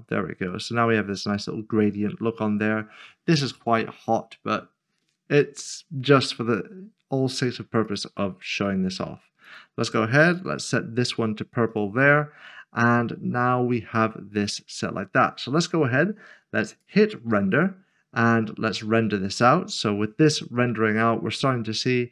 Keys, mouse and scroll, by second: 0.1-0.5 scroll up 1, 0.5 middle click, 4.6 shift+middle click, 4.8-6.8 scroll down 1, 7.8 scroll down 1, 8.0 click, 14.4 click, 16.7 click, 19.6 scroll down 1.